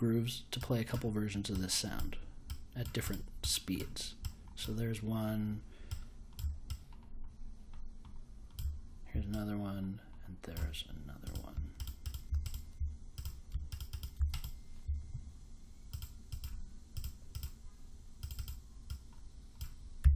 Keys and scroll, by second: 20.0 2.